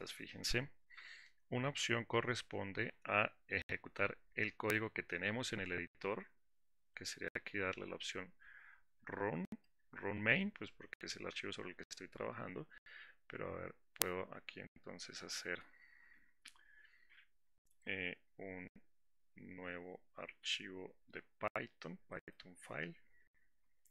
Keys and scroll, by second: 1.2 alt+4.